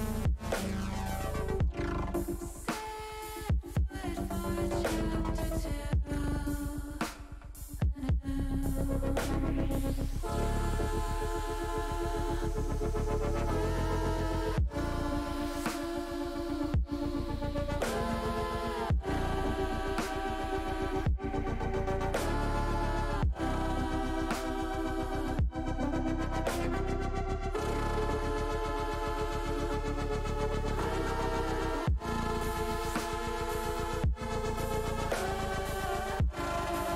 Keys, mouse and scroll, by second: 6.6 middle click, 7.1 middle click, 7.6 shift+middle click, 9.4 click, 10.8 click, 12.0 middle click, 13.1 shift+d, 13.5 click, 15.1-17.4 drag, 17.7 ctrl+z, 18.3 middle click, 20.3 e, 22.8 click, 23.7 middle click, 24.2 middle click, 28.1 a, 29.0 a, 29.6 click, 32.0 l, 32.9 middle click.